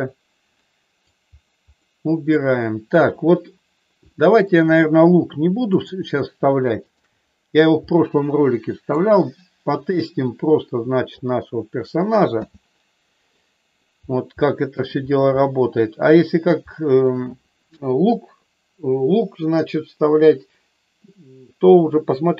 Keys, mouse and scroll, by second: 0.6 middle click, 1.8 middle click, 4.0 middle click, 5.8 click, 6.8 shift+click, 7.8-8.9 middle drag, 9.8-11.2 drag, 12.3 h, 13.3 middle click, 14.3 shift+middle click, 15.3 middle click, 16.5 shift+middle click.